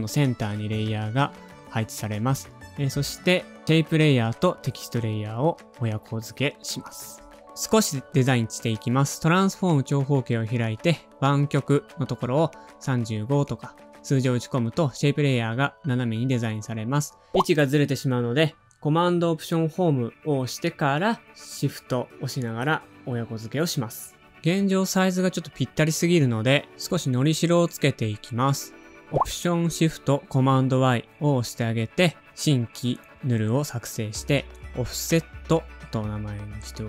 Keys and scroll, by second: 11.7-12.6 typing, 15.0 alt+super+Home, 15.9 super+z, 28.9 alt+shift+super+y, 34.5 Return, 34.5 typing, 36.5 Return, 36.7-36.8 typing.